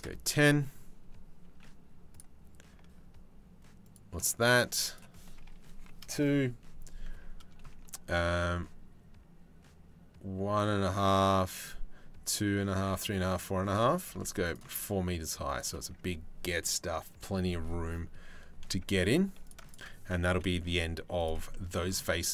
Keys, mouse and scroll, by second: 1.0 ctrl+r, 4.5-5.6 drag, 13.6 ctrl+r, 18.8 3, 19.0 click, 19.9 Delete, 21.1 middle click, 21.7 middle click.